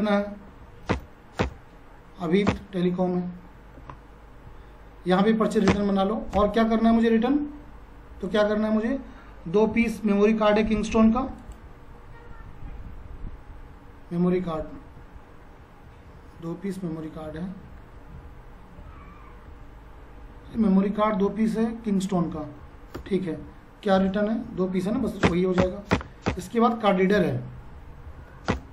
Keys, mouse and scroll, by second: 0.5 2, 0.9 Return, 3.7 ctrl+a, 6.3 space, 8.3 click, 11.4 click, 13.0 Down, 23.0 Return, 25.0 2, 25.2 Return, 27.2 space, 27.5 Down, 28.5 Return.